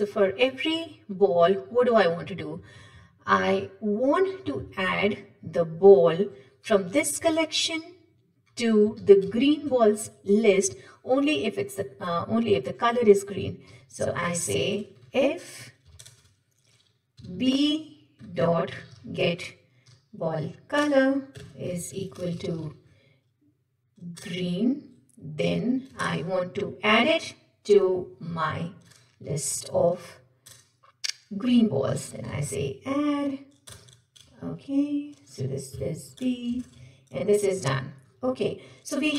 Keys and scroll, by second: 2.5 Tab, 7.3 ctrl+shift+Left, 9.3 ctrl+shift+Right, 14.1 Tab, 16.0 ctrl+shift+Return, 20.8 Return, 26.0 shift+Return, 30.5 Return, 36.6 ctrl+shift+Return.